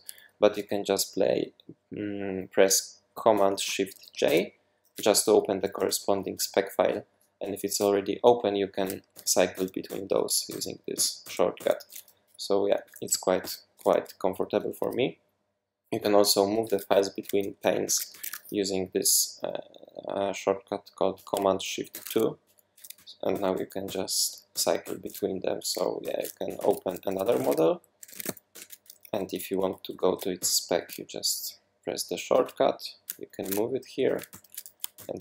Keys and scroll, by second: 4.2 shift+super+y, 9.1 shift+super+y, 9.5 shift+super+y, 9.8 shift+super+y, 10.9 shift+super+y, 13.4 shift+super+}, 17.9 super+2, 18.1 super+1, 21.9 shift+super+2, 23.3 shift+super+y, 23.8 shift+super+y, 24.5 shift+super+y, 26.0 shift+super+y, 26.6 super+p, 27.0-28.8 typing, 30.4 shift+super+y, 33.4 shift+super+2, 34.3 shift+super+[, 34.9 shift+super+y.